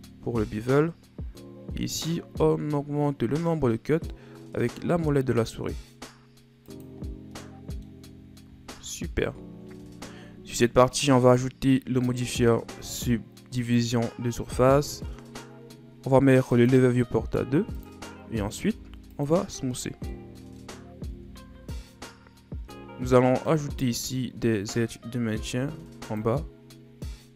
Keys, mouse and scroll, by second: 7.0-7.4 scroll down 1, 7.4 middle click, 8.1 scroll down 5, 9.1 Tab, 9.4-10.0 scroll down 7, 10.3-12.1 scroll up 2, 12.1-15.1 drag, 16.5-18.7 drag, 18.7 w, 19.6 a, 19.8 scroll down 2, 20.1-20.7 middle drag, 20.7-21.1 scroll up 4, 21.1 Tab, 21.6-22.4 scroll up 4, 22.4 scroll down 2, 22.7-23.2 scroll up 5, 23.2-25.4 middle drag, 25.4 ctrl+r.